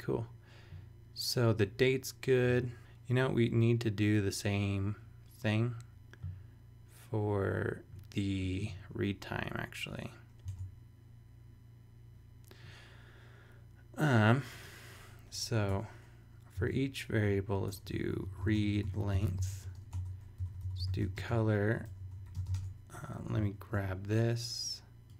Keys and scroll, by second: 2.6 super+Tab, 10.6 super+Tab, 15.7 Return, 16.5-22.3 typing, 22.5 super+Tab, 23.4 shift+super+Tab, 23.5 shift+super+e.